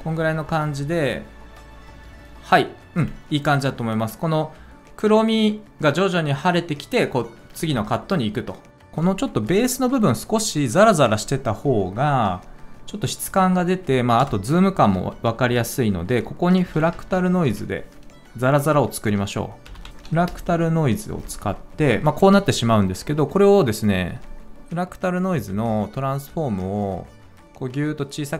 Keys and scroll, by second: 7.5 space, 14.1 BackSpace, 16.5 f, 18.0 typing, 19.4-20.1 typing.